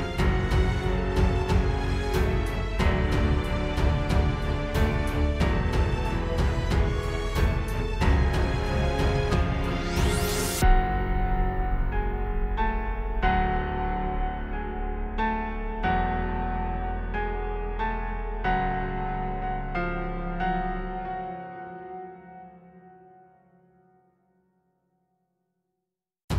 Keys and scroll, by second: 2.3 super+z, 2.8 super+j, 3.1 super+e, 5.4 super+], 8.8 super+g, 11.9 space, 12.6 super+s, 17.0 space, 18.0 space, 20.3 space, 21.1 space, 21.3 space, 21.6 space, 22.4 shift+super+i.